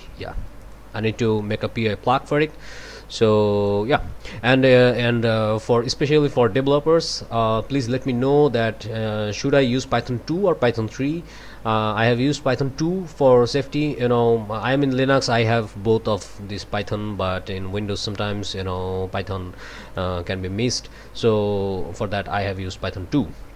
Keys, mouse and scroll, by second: 0.5 click, 1.8-3.9 drag, 18.7-20.2 drag.